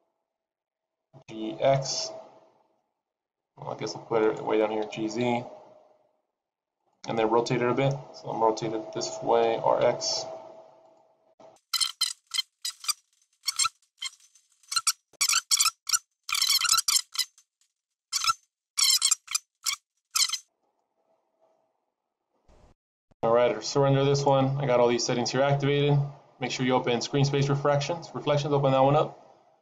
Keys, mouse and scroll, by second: 0.8 g, 4.8 g, 11.4-14.4 typing, 19.5 click, 21.7 click, 24.0 click.